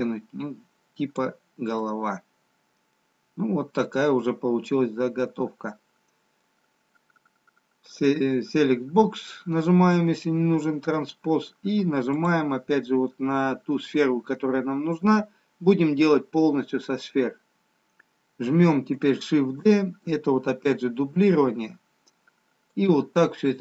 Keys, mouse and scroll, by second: 0.1 click, 1.8 middle click, 2.9-4.3 scroll down 1, 4.3 middle click, 8.2 click, 10.2 middle click, 12.3 click, 19.4 shift+d.